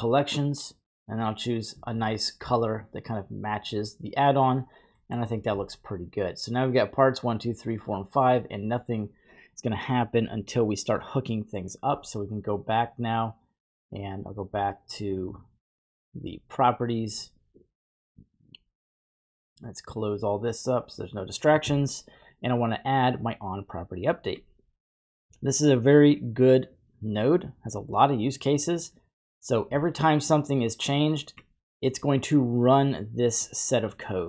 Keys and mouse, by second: 5.0 middle click, 5.9-7.8 drag, 8.4-9.1 drag, 10.4 middle click, 14.5 click, 16.1 click, 19.2 drag, 19.9 click, 22.5-24.3 drag, 23.7-24.8 typing, 25.4 middle click, 26.7-31.4 drag, 32.1 middle click, 33.4-34.0 middle drag.